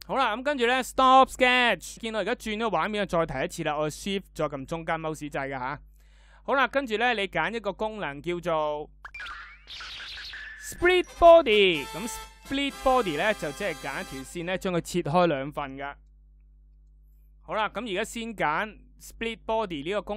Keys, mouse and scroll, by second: 1.9-6.9 shift+middle drag.